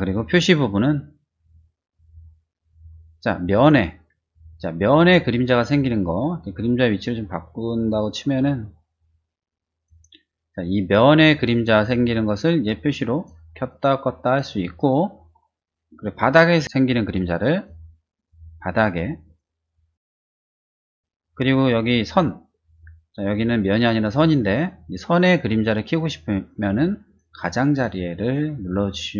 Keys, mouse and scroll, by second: 0.9 middle click, 7.0 click, 8.8-9.8 drag, 13.1 click, 13.7 click, 14.2 click, 14.8 click, 18.6 click, 19.2 click, 19.7 click, 20.3 click, 22.2 middle click, 23.7 click, 24.4 click, 27.0 click, 27.7 click, 28.2 click, 28.8 click.